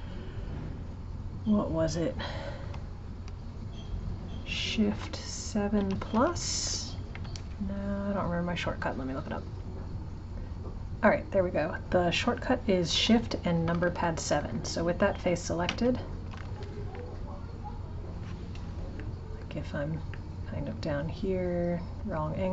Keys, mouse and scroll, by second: 5.0 shift+7, 5.5 shift+7, 5.8 shift+=, 7.1 Escape, 19.0 right click, 19.8 click, 20.1-21.9 middle drag, 21.9 click.